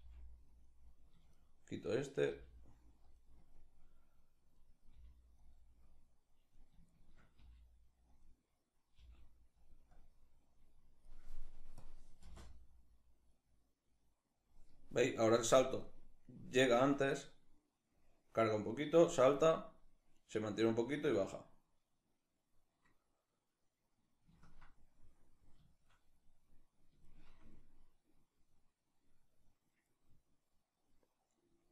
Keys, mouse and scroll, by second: 1.0 shift+right click, 2.0 g, 3.2-5.2 drag, 4.6 g, 5.5-6.6 drag, 6.6 shift+right click, 7.0 g, 7.8 click, 8.6 g, 9.6-11.4 drag, 11.8 space, 24.0-25.2 ctrl+middle drag, 25.5-28.0 middle drag.